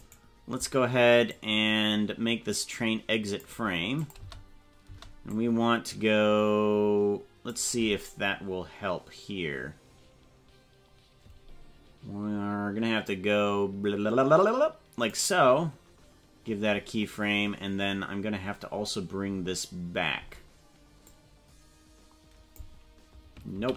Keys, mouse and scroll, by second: 0.0 right click, 1.3-3.5 drag, 4.1 click, 4.2 space, 4.9 space, 5.3-7.6 drag, 8.2 scroll down 4, 8.8 scroll down 2, 13.1-15.2 drag, 17.7 scroll down 4, 18.8-19.2 scroll down 2, 21.0-22.6 drag.